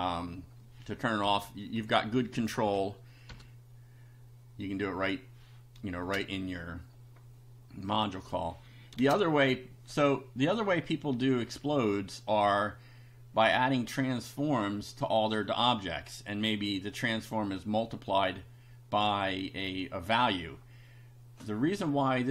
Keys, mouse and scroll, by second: 1.3 BackSpace, 1.8 Down, 2.7 Right, 3.6 BackSpace, 6.0 shift+a, 7.9 click, 9.0 shift+a.